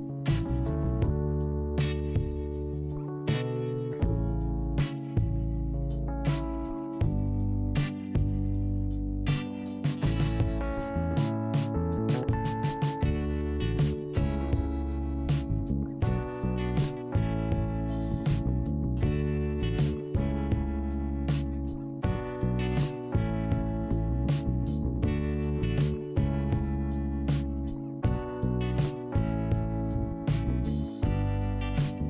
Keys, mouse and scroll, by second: 3.2 scroll down 1, 4.5 click, 6.2 click, 8.9 click, 12.1 click, 20.0 scroll up 1, 20.9 click, 22.3 click, 22.4 click, 24.0 click, 29.0 click, 30.2 i, 31.3 scroll up 1.